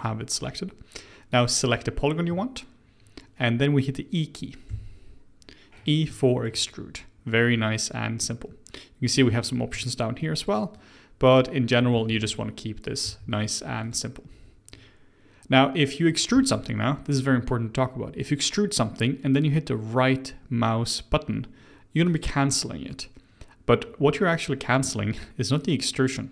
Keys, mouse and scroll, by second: 0.9-1.2 scroll down 1, 1.2 click, 1.6 click, 4.6 e, 6.1-9.1 shift+middle drag, 9.1-11.9 drag, 11.9 ctrl+z, 13.0 e, 16.3 e.